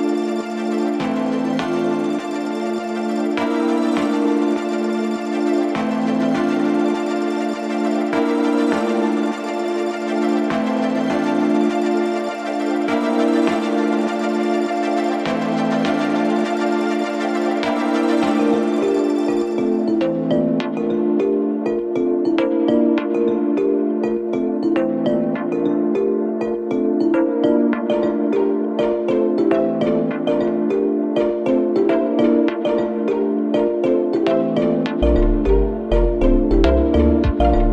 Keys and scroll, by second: 4.7 4, 13.3 F1, 15.3 F1, 15.5 F2, 19.4 3, 23.4 4, 28.8 4, 35.7 3.